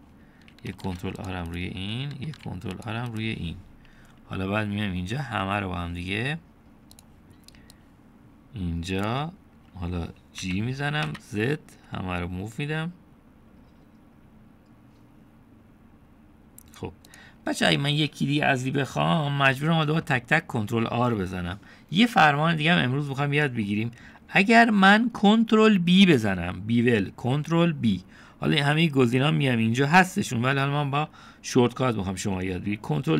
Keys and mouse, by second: 0.2 ctrl+r, 2.2 ctrl+r, 3.5 ctrl+r, 5.7 click, 8.0 click, 8.8-10.1 drag, 11.4 g, 23.1-24.6 middle drag, 32.9 middle click.